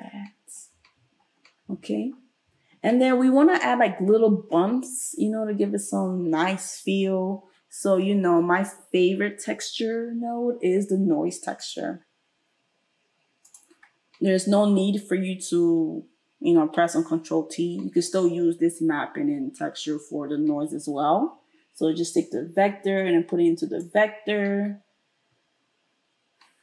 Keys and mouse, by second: 8.0 space, 13.5-22.1 middle drag, 22.1-26.6 drag.